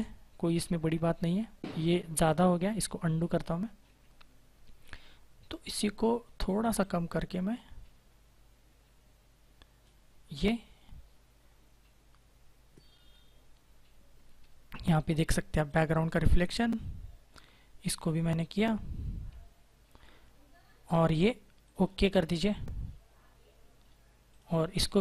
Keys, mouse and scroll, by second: 3.7 ctrl+z, 5.3-5.9 typing, 6.7 click, 15.6 click, 21.5 click, 24.2 click.